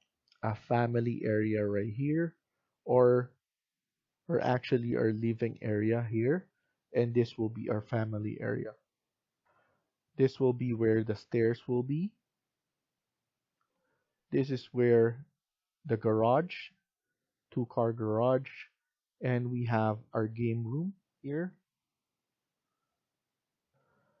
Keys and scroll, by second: 3.9 F1, 4.1 F1, 9.4 F1, 13.5 F1, 23.6 F1.